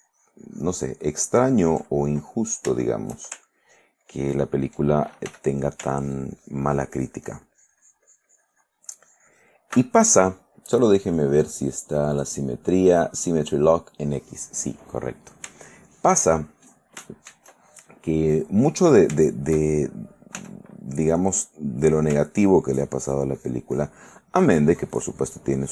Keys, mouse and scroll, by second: 2.5 middle click, 3.8 ctrl+click, 5.4 f, 5.8 ctrl+click, 6.1-9.0 ctrl+drag, 9.2 ctrl+click, 11.1 click, 12.3 click, 15.0 middle click, 16.0 shift+right click, 16.5-18.8 shift+middle drag, 19.3 shift+middle click, 20.5 f, 21.9 click, 22.5-25.6 ctrl+drag.